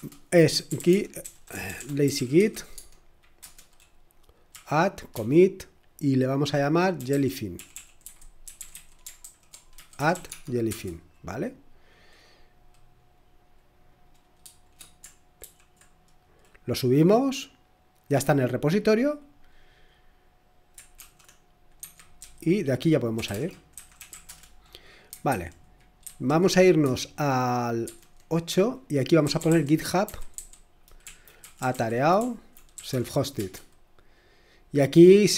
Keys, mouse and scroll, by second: 0.0 Return, 0.3-2.9 typing, 3.4 Return, 4.3-5.1 typing, 6.7-10.7 typing, 13.0-13.9 typing, 15.4 p, 21.0 shift+;, 21.8 Escape, 22.2-24.6 typing, 25.3 super+2, 25.8-26.5 typing, 27.8 super+8, 29.0-33.4 typing.